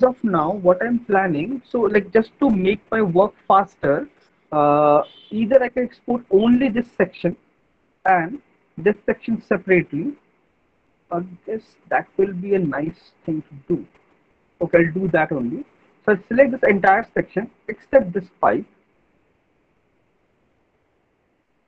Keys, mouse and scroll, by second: 5.0 alt+middle click, 6.8 click, 8.3 alt+middle click, 11.1 middle click, 12.8 alt+middle click, 13.2 middle click, 13.4 middle click, 14.2 alt+middle click, 15.3 alt+middle click, 15.7 middle click, 16.9 alt+middle click, 17.8 ctrl+click, 19.1 alt+middle click, 21.3 alt+click.